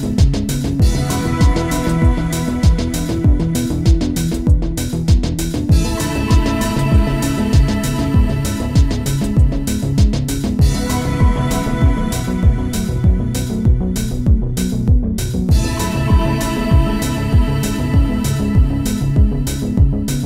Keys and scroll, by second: 8.1 space, 10.9 space, 12.8 space.